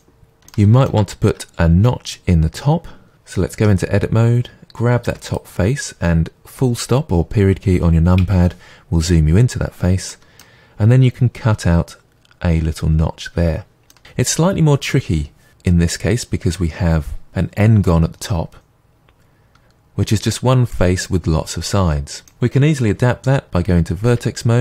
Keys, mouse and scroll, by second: 1.1-3.5 scroll up 2, 3.5 scroll up 1, 3.6 Tab, 5.1 3, 5.3-8.2 drag, 8.2 KP_Decimal, 9.6-10.1 scroll down 2, 10.1-18.6 middle drag, 18.7 middle click, 24.1 1.